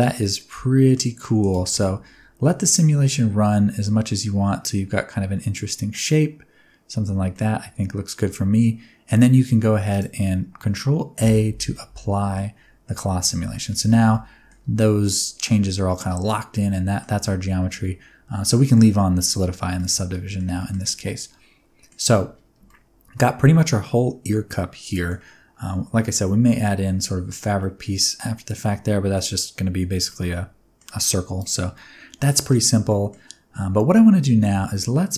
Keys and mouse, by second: 1.5 space, 2.7 click, 7.0 space, 7.3-9.0 middle drag, 9.8 click, 11.2 ctrl+a, 12.3-12.8 middle drag, 13.5 middle click, 13.8 Tab, 14.1 middle click, 15.0-17.0 middle drag, 17.1 Tab, 19.7 middle drag, 20.1 ctrl+middle click, 20.5 shift+middle drag, 20.8-21.8 middle drag, 22.6-25.1 middle drag, 27.5-29.1 middle drag, 30.0 middle click, 31.7 middle click, 32.8 middle click.